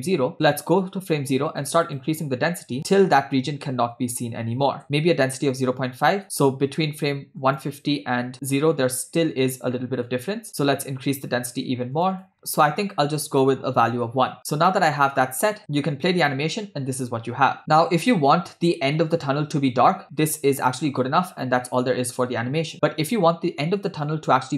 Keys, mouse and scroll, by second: 1.5-4.8 drag, 4.0 Right, 4.1 Right, 6.3 click, 7.6 click, 10.2 click, 12.0 click, 13.4 click, 14.4-15.5 scroll down 12, 15.8 space, 20.3 space, 24.4 click.